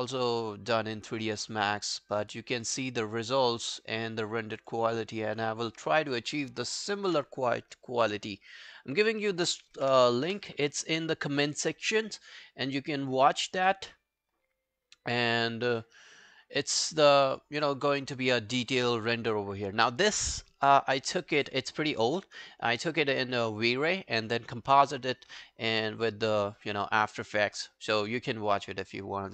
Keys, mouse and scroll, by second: 5.0 right click, 9.5 ctrl+c, 9.8 v, 10.3 Return, 18.2 right click.